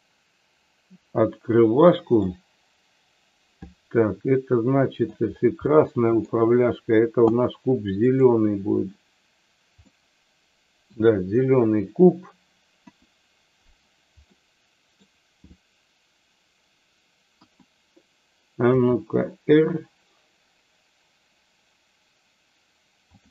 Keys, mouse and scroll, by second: 2.3-5.1 middle drag, 5.6 middle click, 8.0 click, 9.9-10.9 middle drag, 12.7 KP_1, 14.3 middle click, 17.2 KP_1, 18.6 r.